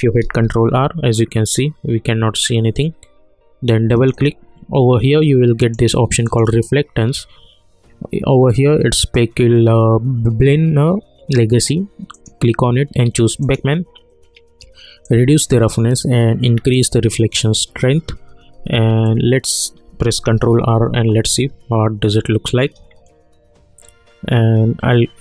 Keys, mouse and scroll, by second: 0.2 ctrl+r, 3.9 click, 12.1 click, 12.7-16.7 drag, 19.0 click, 20.2 ctrl+r.